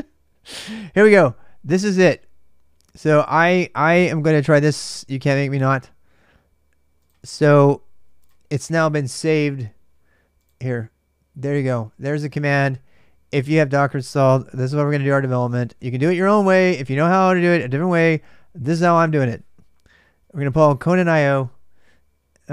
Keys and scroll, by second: 14.2-16.4 typing.